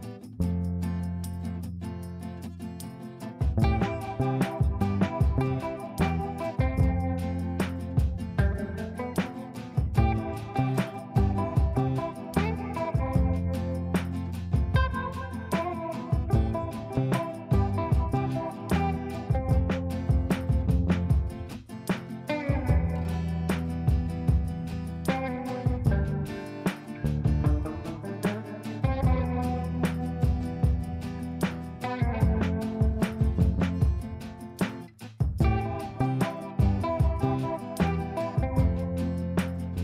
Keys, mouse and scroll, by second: 0.0-1.7 drag, 2.4 c, 2.7 click, 3.2 F2, 3.9-4.2 click, 5.2 click, 8.6 space, 9.1 shift+5, 9.9 ctrl+space, 11.3 click, 13.4 click, 20.0-21.3 shift+drag, 21.9 F3, 23.1 click, 24.9 right click, 25.2 F2, 25.4 click, 27.3 shift+click, 27.8 r, 28.2 click, 29.4 shift+click, 29.7 c, 30.6-33.0 drag, 33.0 ctrl+right click, 33.4 click, 34.7 ctrl+a, 36.1 shift+o, 37.8 shift+f, 38.7 ctrl+space.